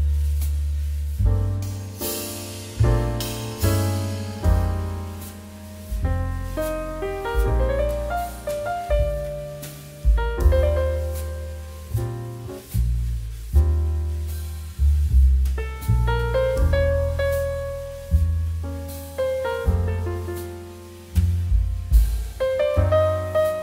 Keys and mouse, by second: 13.8 click, 14.5 middle click, 14.8 shift+middle click, 15.1 s, 15.9 click, 16.2 g, 17.0 click, 17.5 middle click, 17.8 shift+middle click, 17.9 middle click, 18.2 shift+middle click, 18.5 shift+middle click, 18.6 middle click, 18.9 shift+d, 19.1 middle click, 20.6 click, 20.8 middle click, 21.1 shift+middle click, 21.6 click, 21.8 middle click, 21.9 shift+middle click, 22.1 middle click, 23.4 click.